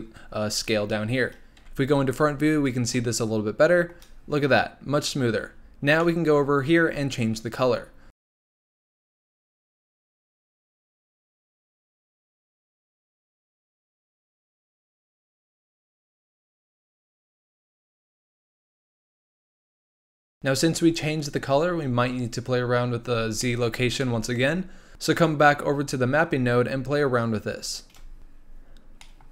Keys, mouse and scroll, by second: 1.6 KP_1, 2.4-2.9 scroll up 3, 2.9-5.5 shift+middle drag, 5.5-6.0 scroll down 8, 6.0 middle click, 6.5-8.2 scroll up 6, 8.2 click, 10.4 click, 10.9 drag, 13.7 middle click, 13.8-14.4 scroll up 1, 14.4 click, 14.6 click, 16.6 click, 17.9 click, 18.1 click, 19.0 click, 19.1 click, 22.9-23.4 scroll down 4, 23.4 middle click, 24.3-26.1 scroll up 4, 27.9 click, 28.7 scroll down 4, 29.0 middle click, 29.2 scroll up 1.